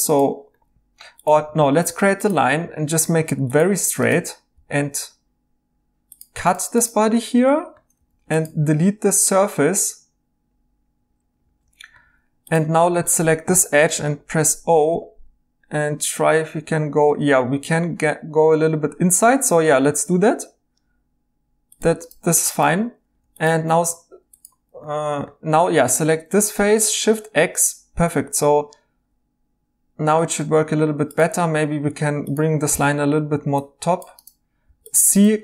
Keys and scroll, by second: 0.9 Escape, 1.6 a, 4.5 c, 7.9 3, 8.5 x, 12.0 2, 13.9 o, 22.7 3, 26.5 x, 31.8 2, 32.7 g, 33.9-35.4 typing.